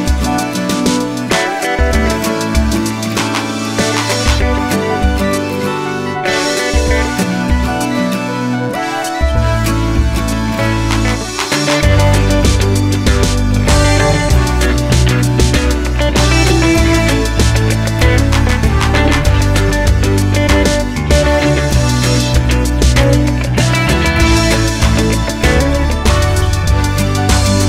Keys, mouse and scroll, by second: 0.5-2.4 middle drag, 2.3 3, 2.4 click, 2.9 s, 4.3 middle click, 4.7 click, 4.9-7.1 middle drag, 5.4 s, 7.1 click, 7.2-9.2 middle drag, 7.7 g, 9.2 click, 9.7-10.8 middle drag, 10.8 click, 11.3 click, 11.7 shift+click, 11.9-13.8 middle drag, 12.1 e, 13.8 click, 13.9-27.2 middle drag, 14.6 e, 16.2 g, 17.6 scroll down 1, 19.4 ctrl+r, 24.1 ctrl+r, 27.3 click.